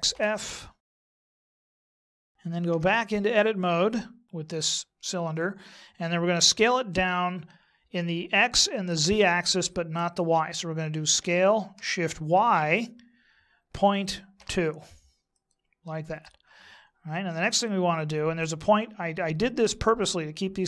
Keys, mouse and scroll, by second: 0.9 middle click, 1.1 KP_1, 1.7 alt+Home, 2.7 Tab, 12.3 s.